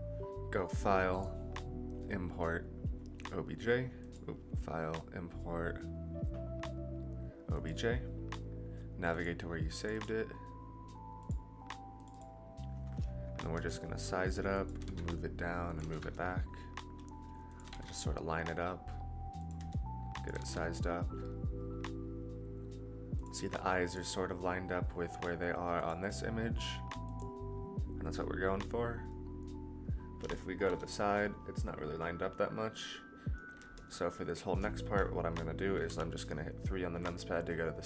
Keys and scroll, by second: 13.5 s, 14.7 g, 15.8 g, 19.5 s, 20.3 g, 30.6 KP_3, 35.8 KP_3.